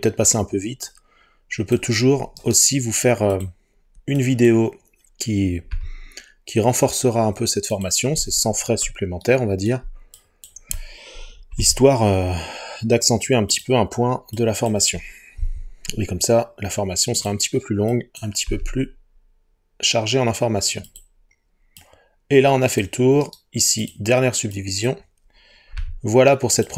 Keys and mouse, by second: 2.4-3.5 right drag, 5.7 g, 7.7 click, 11.6 g, 13.6 click, 15.4 g, 17.2 click, 23.3 right click, 25.8 g, 26.6 click.